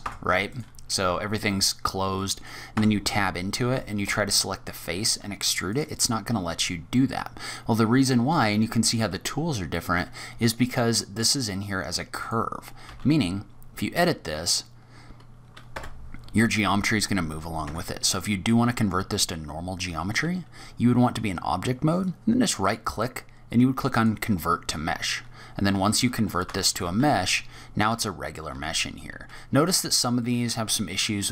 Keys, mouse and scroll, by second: 0.0 Tab, 0.4 click, 2.1 middle click, 2.7 Tab, 4.0 3, 4.3 click, 5.7 click, 10.7 middle click, 12.1 click, 12.7 g, 16.9-17.5 scroll down 3, 17.4 scroll up 2, 17.6 Tab, 18.2 middle click, 21.9 right click, 24.7-25.3 scroll up 3, 25.3-26.5 scroll down 2, 26.5 Tab, 26.9 e, 27.9 a, 28.5 e, 30.1 middle click.